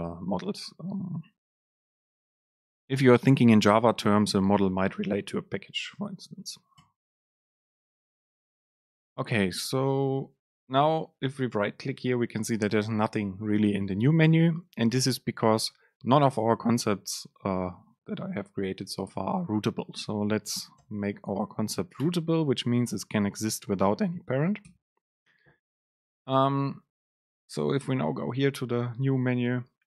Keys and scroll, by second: 20.9 super+space, 24.7 ctrl+shift+super+F9.